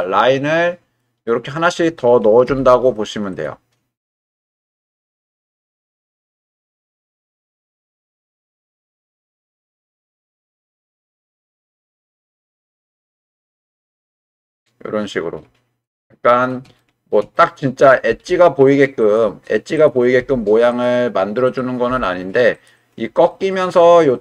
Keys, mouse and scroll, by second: 0.0-1.0 middle drag, 2.5 k, 5.6 middle click, 6.8 shift+middle click, 7.6 click, 8.7 g, 9.6 click, 10.0 middle click, 11.3 g, 12.0 click, 12.4 click, 12.7 g, 14.1 click, 14.5 middle click, 16.0 middle click, 16.8 shift+middle click, 17.4 middle click, 18.1 g, 19.0 click, 20.2 g, 20.7 click, 21.5 click, 21.9 g, 22.5 click, 23.9-24.2 middle drag.